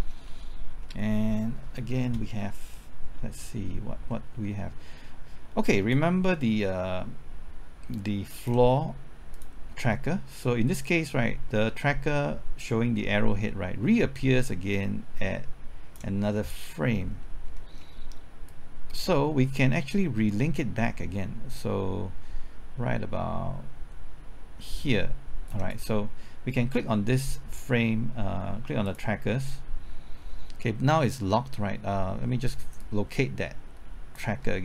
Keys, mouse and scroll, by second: 0.0 scroll down 1, 0.3 middle click, 0.7-2.8 scroll up 1, 2.8 middle click, 5.9-16.2 drag, 16.2 scroll down 1, 16.5 middle click, 17.1-17.6 scroll up 1, 17.6 middle click, 18.5-25.5 drag, 25.5-26.6 right drag, 28.8 click, 34.4 middle click.